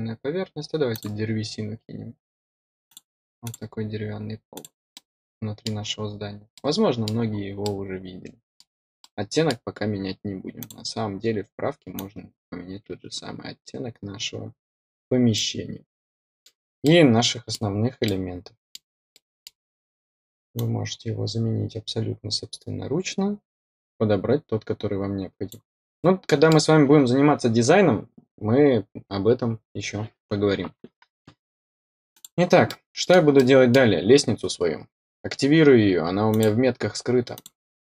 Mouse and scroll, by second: 0.9 click, 2.8 click, 3.4 click, 4.5 click, 4.9 middle click, 6.5 middle click, 7.3 middle click, 7.6 middle click, 8.9 middle click, 10.5 click, 11.9-14.8 drag, 15.3-16.4 middle drag, 16.8 middle click, 18.0 middle click, 19.1 middle click, 20.5-25.4 drag, 25.9 middle click, 32.1 click, 32.6 middle click, 34.9-36.2 scroll down 1, 36.2 click, 37.3 click.